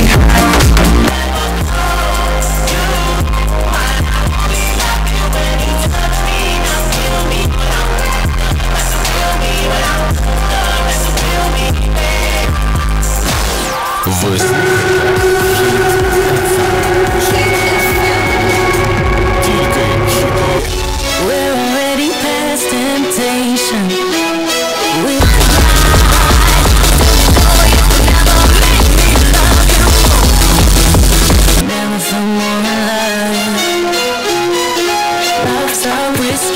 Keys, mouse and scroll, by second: 1.1 Page_Down, 21.1 Page_Down, 31.7 Page_Down.